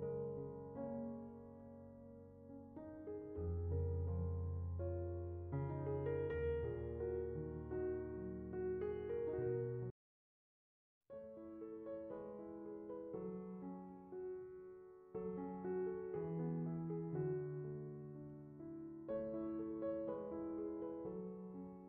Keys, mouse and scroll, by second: 1.9-2.2 drag, 2.7-3.1 drag, 3.3 click, 4.7-5.1 drag, 5.5-6.7 drag, 7.5 middle click, 8.3 click, 8.5 scroll down 2, 8.7 middle click, 9.1-9.8 scroll up 5, 9.2 middle click, 9.8 scroll down 1, 10.0 middle click, 11.1 click, 13.3-13.8 drag, 14.7 middle click, 15.6 click, 16.5-16.9 drag.